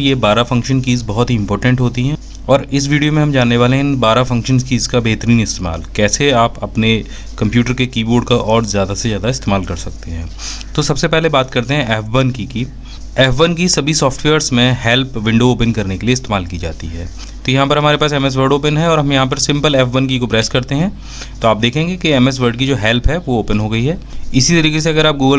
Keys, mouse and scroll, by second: 11.7 f, 12.6 F1.